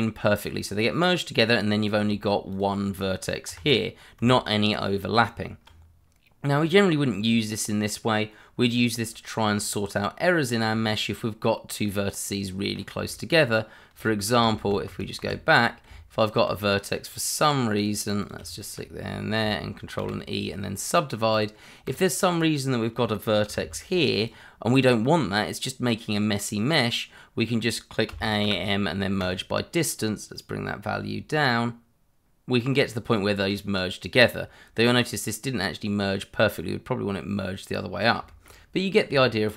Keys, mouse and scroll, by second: 1.5-2.0 scroll up 1, 2.1 shift+middle click, 3.4 g, 4.2 Escape, 4.5-5.1 scroll down 1, 5.1 Tab, 10.8 shift+middle click, 12.7 scroll up 1, 13.1 shift+middle click, 14.0 shift+middle click, 14.1 middle click, 14.6 ctrl+z, 15.8 Tab, 16.6 scroll up 1, 17.0 click, 18.3 double click, 18.5 shift+click, 20.0 ctrl+e, 21.3 click, 22.3 middle click, 23.4 g, 24.1 click, 28.1 a, 28.4 m, 29.2 click, 33.0 click, 35.3 middle click, 37.8 scroll down 1, 38.2 shift+middle click, 39.1 Tab.